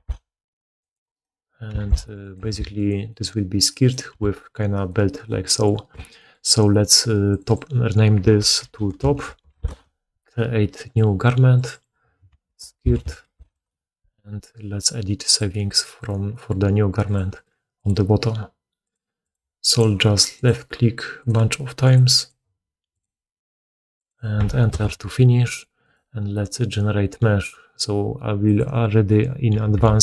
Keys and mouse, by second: 1.0 right click, 1.1-1.6 middle drag, 1.6 s, 2.3 g, 3.7 right click, 4.0 g, 5.0 right click, 5.5 middle click, 5.7 right click, 5.8-7.2 middle drag, 7.2 click, 7.3 middle click, 7.4-11.6 drag, 11.6 middle click, 11.7-30.0 drag, 25.7 middle click, 25.7 right click.